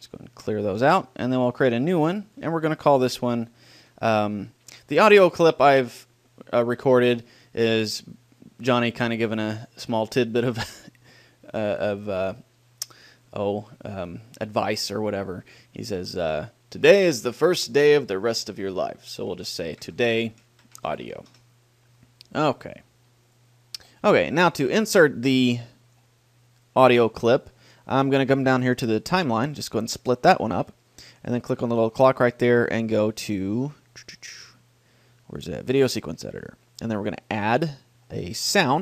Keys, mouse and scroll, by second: 0.0-1.6 drag, 1.8-21.3 drag, 24.7-27.5 drag, 29.3-31.0 drag, 31.4-35.9 drag, 37.4-38.8 drag.